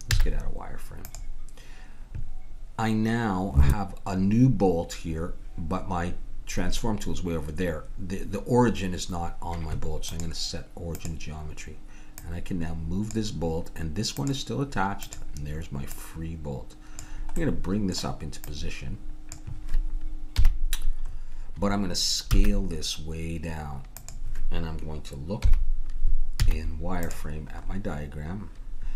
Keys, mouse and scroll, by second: 0.1 z, 10.1-11.9 drag, 12.2-17.8 drag, 17.8 middle click, 18.4-20.1 drag, 20.5 KP_1, 22.4 s, 25.5 KP_1, 27.1 z.